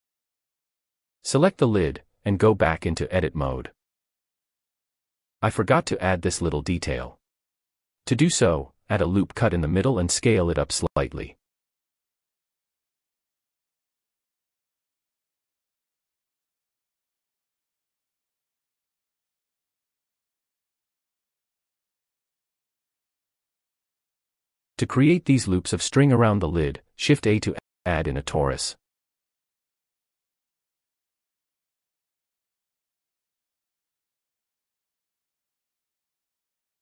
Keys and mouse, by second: 0.3 Tab, 9.0 click, 12.7 s, 15.4 Tab, 18.0-19.7 middle drag, 21.1-22.5 shift+middle drag, 27.8 shift+a.